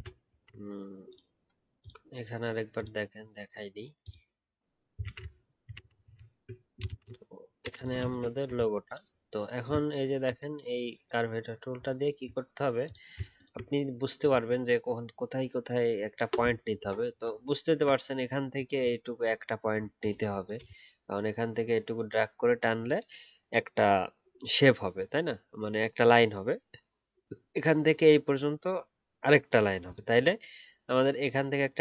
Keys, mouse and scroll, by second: 5.0 ctrl+z, 5.1 ctrl+z, 5.8 ctrl+z, 5.9 ctrl+z, 6.0 ctrl+z, 6.8 ctrl+shift+z, 8.5 alt+scroll up 1, 12.0-12.7 alt+scroll up 2, 13.3 ctrl+click, 17.6-18.0 alt+scroll up 1.